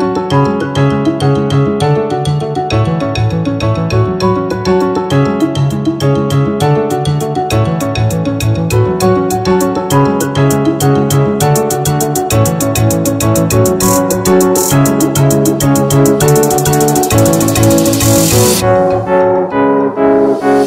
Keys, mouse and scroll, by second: 0.5 Tab, 1.6 Tab, 2.2 middle click, 3.6 s, 4.0 y, 6.0 click, 7.3 Tab, 7.8-8.9 scroll down 2, 9.1 s, 12.0 click, 13.4 click, 15.0 g, 15.1 z, 16.5 click, 17.8 g, 18.0 x.